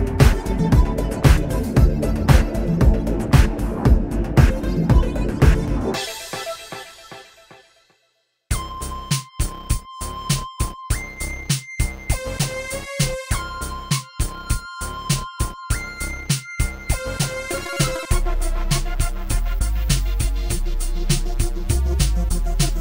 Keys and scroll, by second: 4.7 Delete, 14.9 space.